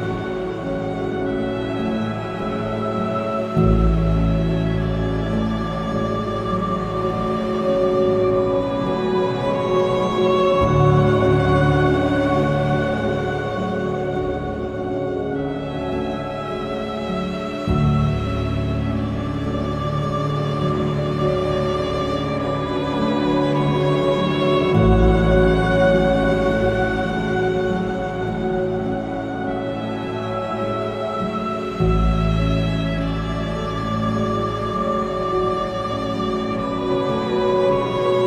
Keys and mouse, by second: 0.5 alt+z, 1.9 g, 2.1 x, 4.7 click, 7.5 g, 7.8 x, 11.1 shift+click, 12.1 g, 12.3 x, 14.1 click, 14.8 Tab, 16.8 KP_3, 19.4 middle drag, 27.4 Tab, 29.6 g, 29.9 y, 31.2 click, 35.1 g, 35.3 y.